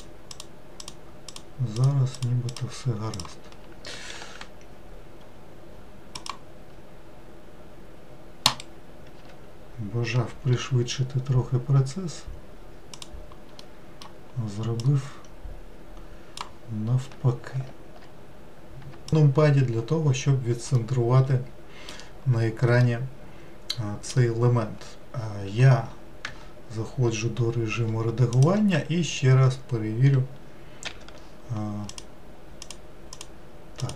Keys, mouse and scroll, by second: 0.3 click, 0.8 click, 1.3 click, 1.8 click, 2.2 click, 2.5 click, 3.1 click, 4.2 ctrl+r, 9.2 s, 13.6-14.8 middle drag, 14.8 click, 19.1 KP_Decimal, 19.8-20.8 scroll up 2, 20.8-25.9 middle drag, 26.3 Tab, 28.4-30.9 drag, 30.9 w, 31.9 click, 32.6 click, 33.1 click, 33.8 click.